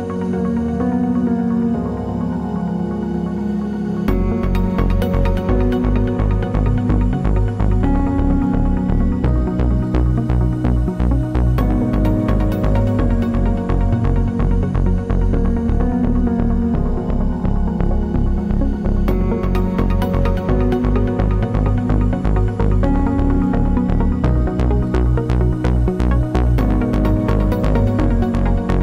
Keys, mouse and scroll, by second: 5.0 t, 5.8 click, 6.4-9.4 typing, 10.6 click, 11.3 KP_1, 11.6 KP_8, 11.8 KP_Enter, 13.1 click, 14.3 KP_Enter, 16.2 v, 16.9 click, 18.1 ctrl+d, 20.0 click, 21.0 KP_1, 21.2 KP_6, 21.3 KP_Enter, 22.4 ctrl+z, 24.0 ctrl+g, 24.9 click, 25.5-27.7 typing.